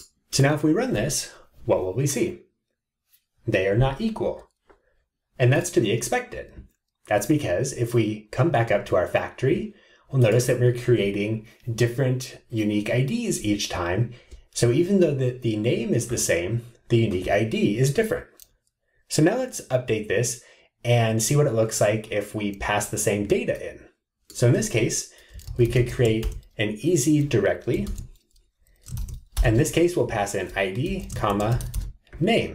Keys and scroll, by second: 27.9 alt+Return.